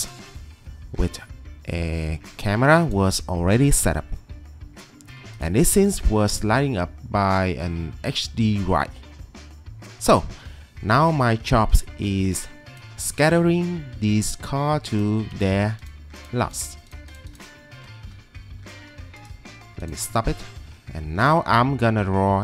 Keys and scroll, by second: 0.2 Escape, 2.2 ctrl+2, 3.9 Escape, 11.7 ctrl+2, 17.7 Escape, 18.8 t.